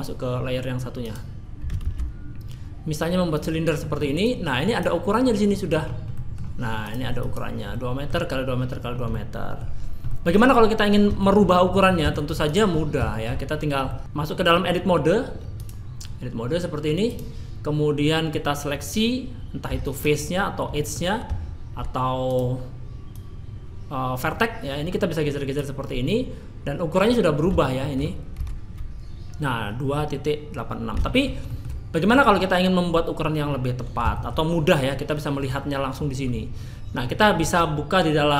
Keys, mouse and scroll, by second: 1.0 click, 1.8 shift+a, 4.2 click, 5.7 scroll up 3, 6.1 middle click, 6.8 click, 7.2 click, 7.7 middle click, 8.8-9.3 scroll up 2, 9.1 middle click, 9.8 scroll down 2, 10.1 middle click, 11.2 shift+middle click, 11.7 middle click, 12.1 shift+middle click, 12.5 click, 12.7 scroll up 3, 13.1 shift+middle click, 13.9 middle click, 15.6 click, 18.0 middle click, 19.7 3, 19.9 click, 20.7 middle click, 22.3 click, 23.1 click, 27.8 shift+middle click, 28.4 Tab, 31.1 shift+middle click, 31.5 middle click, 34.1 shift+middle click.